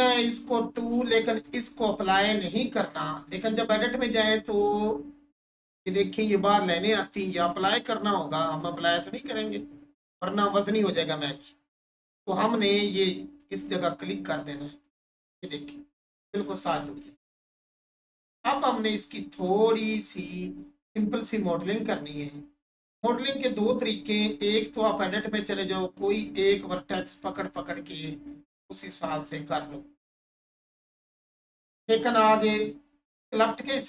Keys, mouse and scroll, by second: 0.6 2, 1.3 Return, 2.3-2.6 scroll up 1, 3.1 Tab, 4.0-4.5 scroll up 1, 13.4 click, 16.1-16.8 scroll down 1, 16.8 Tab, 17.3-17.9 scroll down 1, 18.3 alt+shift+click, 19.4-21.2 scroll down 1, 21.8 scroll up 1, 22.6 Tab, 25.6 click, 29.3 right click, 30.4 1, 31.1 click, 31.4 1.